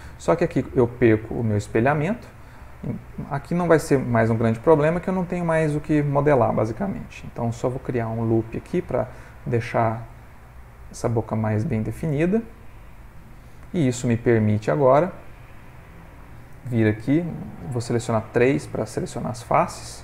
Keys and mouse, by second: 1.3 middle click, 1.8 middle click, 2.2 middle click, 3.6 middle click, 4.3 ctrl+middle click, 4.8 middle click, 4.9 middle click, 6.3 middle click, 7.1 ctrl+r, 11.8 middle click, 14.8 click, 15.6 ctrl+middle click, 15.8 ctrl+middle click, 17.9 3, 18.4 click, 19.5 g.